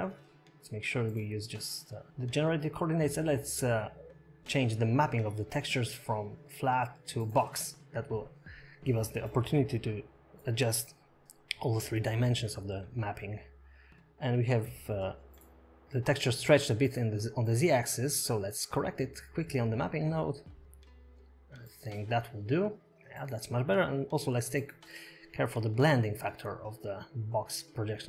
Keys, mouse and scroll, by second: 0.0 scroll down 4, 0.6 click, 2.1 middle click, 2.1 scroll up 5, 3.3 click, 5.5 middle click, 5.5 scroll down 5, 6.1 middle click, 7.9 middle click, 9.2 click, 11.4-11.8 scroll up 3, 11.8 middle click, 14.8 click, 17.2 middle click, 17.8 scroll up 2, 22.2 click, 27.5 shift+middle click, 27.5 scroll down 5, 28.0 middle click.